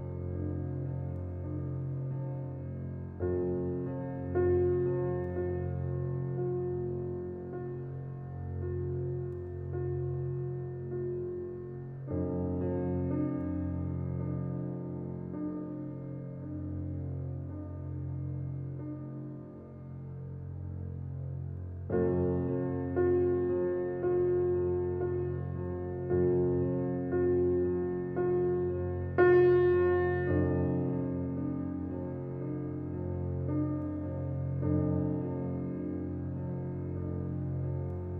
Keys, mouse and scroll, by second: 0.3 click, 0.8-2.2 middle drag, 3.4 click, 4.1 click, 4.7 shift+click, 5.4 s, 7.6-9.2 middle drag, 9.2 g, 10.8 s, 13.9 click, 14.8-15.2 scroll down 6, 15.4 click, 16.3-16.6 scroll up 3, 16.8-17.3 shift+middle drag, 17.3 click, 19.7-20.9 drag, 22.7 s, 24.5 g, 25.8 click, 26.1-26.5 scroll down 1, 26.5-27.7 middle drag, 27.7-28.1 drag, 28.1 scroll up 5, 29.2 click, 30.6 s, 32.2 g, 33.3-33.8 scroll down 4, 33.8 click, 34.2 click, 34.3-34.8 scroll down 1, 34.8-36.2 middle drag, 36.3-36.6 scroll down 2, 36.6-38.0 middle drag, 38.0-38.1 scroll up 2.